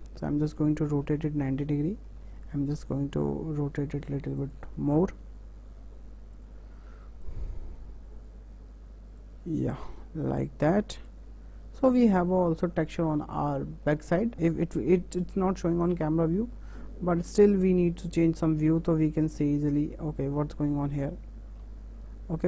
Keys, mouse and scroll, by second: 2.9 s, 5.3 w, 6.4 click, 9.3 click, 10.4 click, 11.1 click, 11.2 Tab, 11.6 scroll down 1, 11.7 scroll up 1, 11.9-14.3 middle drag, 14.3 KP_0, 16.0 click, 16.3 Tab, 17.0 Tab, 17.8-21.7 middle drag, 21.7 ctrl+z.